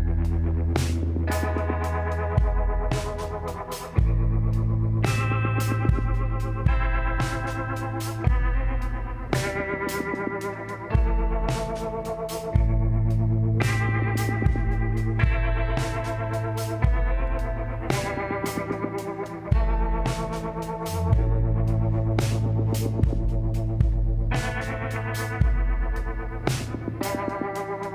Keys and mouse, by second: 1.4 s, 4.4 z, 9.7-11.9 drag, 10.7-12.0 middle drag, 12.1 shift+d, 13.4 s, 16.3 KP_7, 17.0 z, 20.9 s, 23.1 e, 24.9-27.9 drag, 25.8 l.